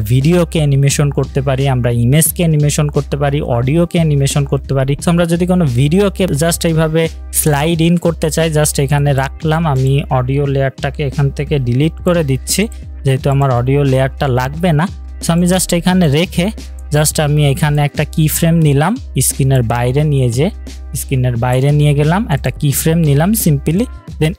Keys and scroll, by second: 14.4 Delete.